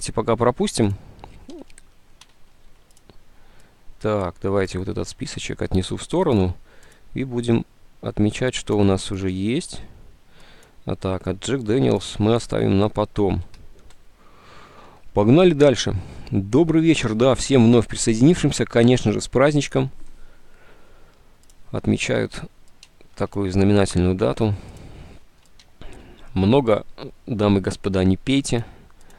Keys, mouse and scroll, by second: 2.6 ctrl+u, 6.9 click.